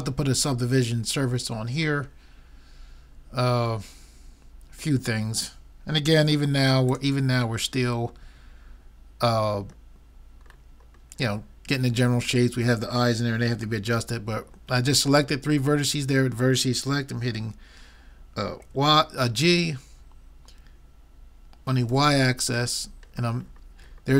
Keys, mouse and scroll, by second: 5.8-7.3 drag, 7.3-8.3 middle drag, 7.7 click, 7.7 right click, 8.5 middle click, 18.7 g.